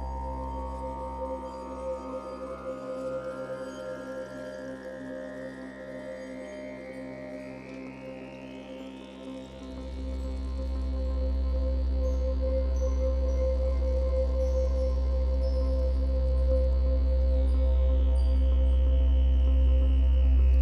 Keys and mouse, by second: 10.5-12.4 ctrl+drag, 12.6-14.6 ctrl+alt+drag, 14.8-16.2 alt+shift+drag, 17.1 click, 19.7 click.